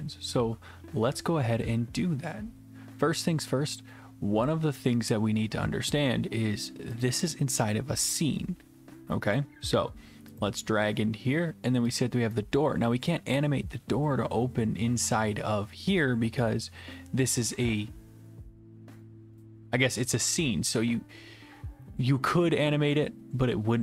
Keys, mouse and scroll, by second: 7.0 click, 10.4 click, 12.0 click, 12.6-13.4 typing, 13.4 right click.